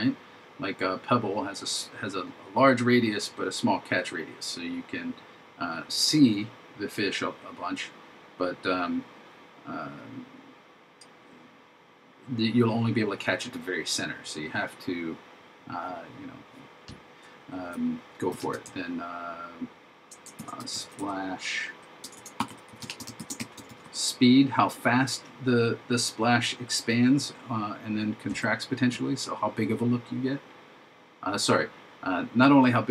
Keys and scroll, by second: 20.4 shift+s, 23.2 shift+s.